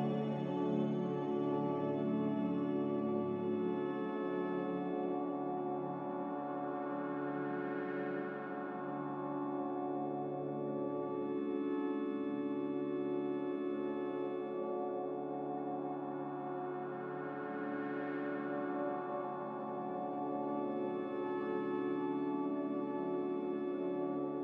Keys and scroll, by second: 1.7 n.